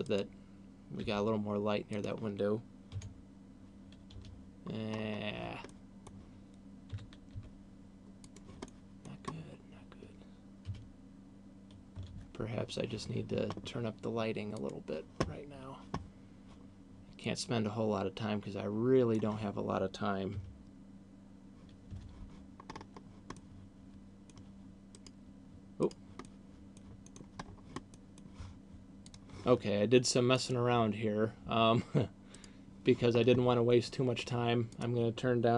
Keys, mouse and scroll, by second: 0.9 g, 1.9 click, 4.4 F12, 4.4 Escape, 4.9 scroll up 3, 5.6 middle click, 7.1 g, 8.4 click, 8.6 middle click, 9.4 scroll down 2, 12.1 F12, 12.1 Escape, 14.4 click, 17.1 click, 22.1 F12, 22.1 Escape, 22.6-23.3 scroll up 4, 23.4 middle click, 24.9 right click, 25.9 right click, 26.1 middle click, 27.1 middle click, 27.6 scroll down 4, 27.9 middle click, 29.4 Escape, 32.6 right click, 34.9 click.